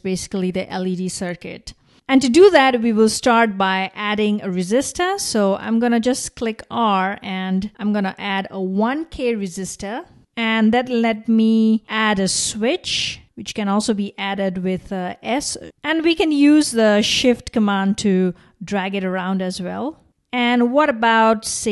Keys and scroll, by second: 6.0 r.